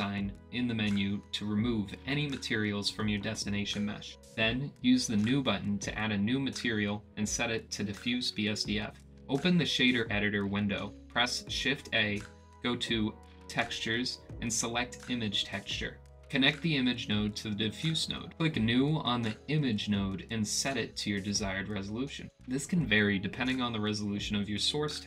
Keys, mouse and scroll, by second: 4.2 click, 6.1-7.7 drag, 8.1-9.1 drag, 10.5-11.3 drag, 12.8 shift+a, 17.1-25.0 drag.